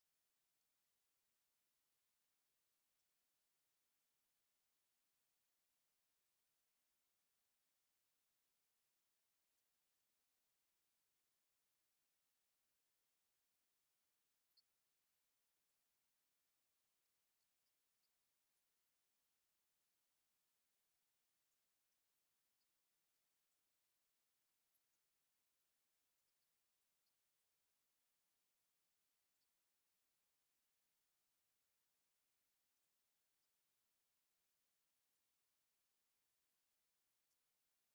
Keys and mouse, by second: 4.0 click, 4.4 right click, 5.0 click, 7.0-10.2 drag, 8.3 KP_0, 11.9-14.0 drag, 14.4-16.6 drag, 15.3 KP_0, 16.9-19.1 drag, 20.2 click, 31.9 click, 34.3-36.8 drag, 35.4 KP_0.